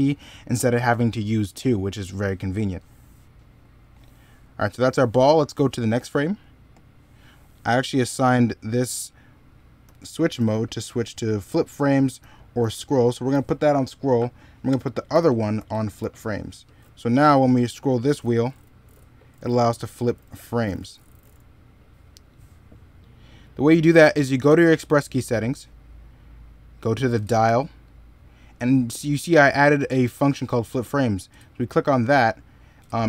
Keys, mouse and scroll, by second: 0.3 middle click, 2.3 middle click, 4.3 middle click, 16.4-20.5 typing.